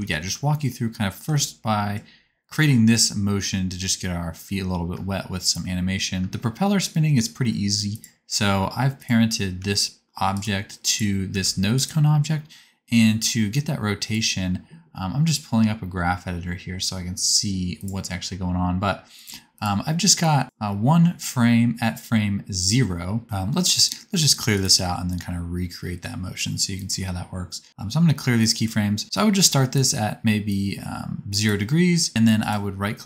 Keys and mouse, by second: 0.1-3.1 shift+middle drag, 4.9 space, 5.4 click, 5.8-8.0 middle drag, 6.2 space, 6.3 space, 8.0 click, 9.5 g, 10.8 click, 11.3 g, 13.1 click, 16.8-19.2 drag, 20.0 middle click, 20.1-28.3 drag, 24.5-28.3 right drag.